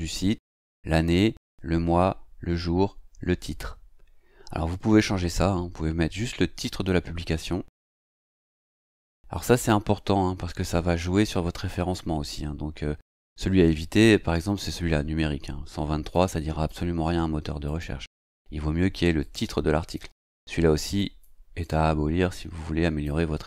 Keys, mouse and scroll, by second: 16.1 click, 17.6 click, 19.2 click, 21.0 click, 21.6-23.2 drag.